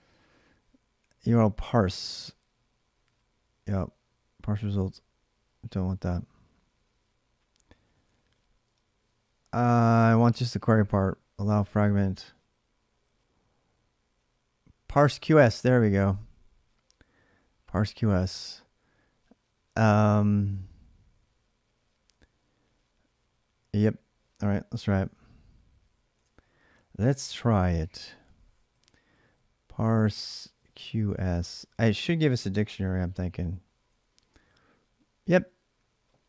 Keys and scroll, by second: 8.4 space, 11.6 space, 24.8 alt+Tab, 25.9 alt+Tab, 27.0 ctrl+a, 27.2 ctrl+a, 28.5 Up, 29.1-30.3 Left, 30.3 Right, 30.5 Right, 31.2 Right, 31.6 Right, 32.5-34.5 typing.